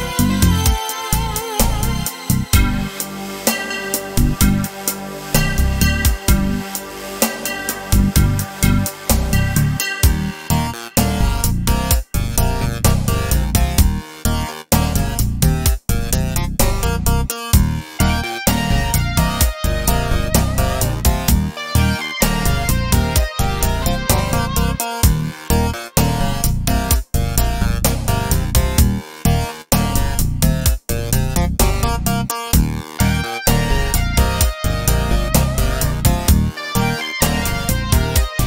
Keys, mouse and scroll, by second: 4.1 shift+middle click, 10.2 KP_0, 11.7-15.2 middle drag, 15.2 click, 16.2 KP_0, 17.5-17.9 scroll down 1, 17.9-20.9 shift+middle drag, 18.4-19.0 scroll up 2, 20.9-22.9 drag, 24.2 click, 25.4-31.7 right drag, 31.7-37.4 drag.